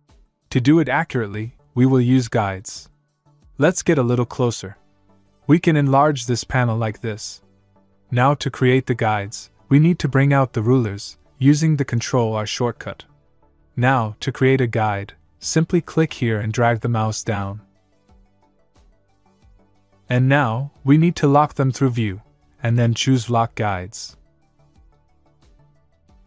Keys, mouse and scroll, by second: 5.0 scroll up 1, 6.1 middle click, 7.9 click, 13.2 ctrl+Num_Lock, 13.4 ctrl+r, 16.1 click.